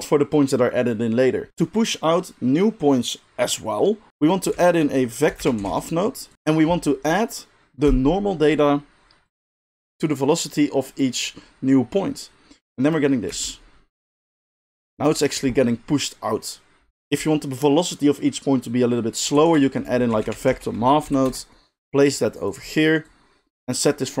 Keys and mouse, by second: 1.5-6.3 middle drag, 4.5 shift+a, 6.3-22.5 drag, 13.3 space, 19.4 shift+a, 22.5 middle click, 23.0-24.2 drag.